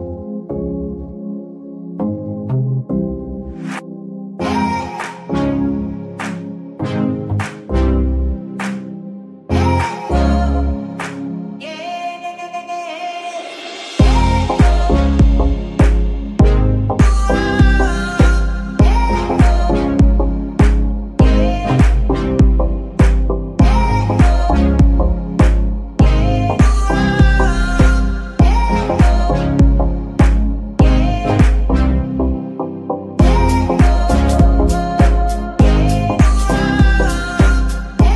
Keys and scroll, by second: 8.8 z, 11.2 ctrl+Tab, 15.2 g, 15.8 Escape, 24.5 g, 25.2 Escape, 28.2 g, 28.8 Escape, 32.8 g, 33.9 Escape, 35.9 r, 36.4 Escape.